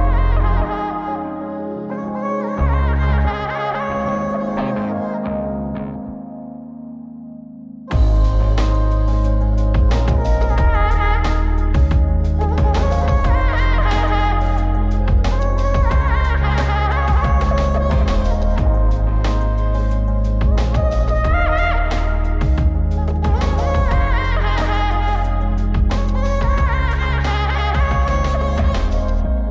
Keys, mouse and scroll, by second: 4.1 click, 5.3 click, 7.7-8.7 drag, 11.2 click, 12.8 p, 15.6 shift+space, 20.1 p, 26.9 shift+space.